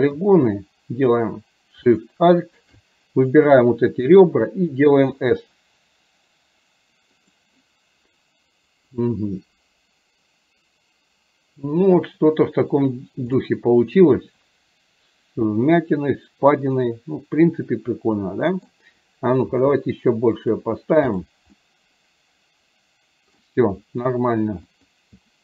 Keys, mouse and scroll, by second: 2.0 alt+shift+click, 13.4-18.9 middle drag, 13.4-15.9 scroll up 1, 15.9-18.9 scroll up 1, 21.6-23.5 middle drag, 24.8-25.4 drag.